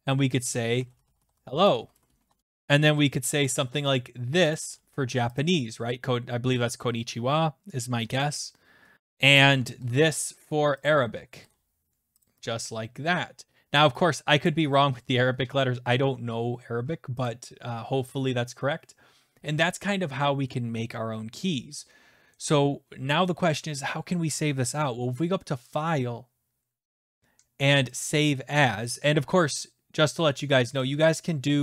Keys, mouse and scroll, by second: 0.0-2.9 typing, 2.1 Caps_Lock, 2.6 click, 3.3 ctrl+c, 4.5 click, 4.6 ctrl+v, 5.3 click, 8.9 typing, 9.0 click, 9.1 click, 9.8 ctrl+c, 10.9 click, 11.4 ctrl+v, 12.2 click, 14.4 click, 17.2 click, 25.7 click, 28.0 click.